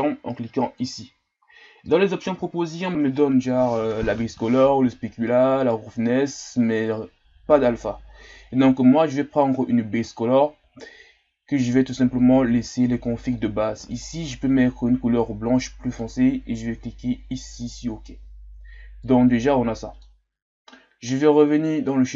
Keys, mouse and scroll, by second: 19.0-22.1 middle drag.